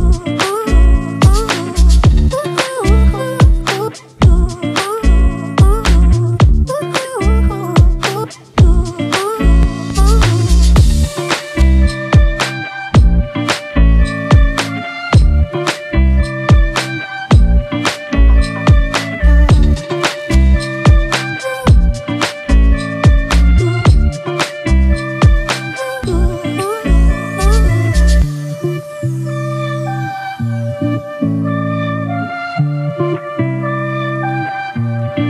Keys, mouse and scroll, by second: 1.4 typing, 30.8 alt+click, 33.8-34.5 typing.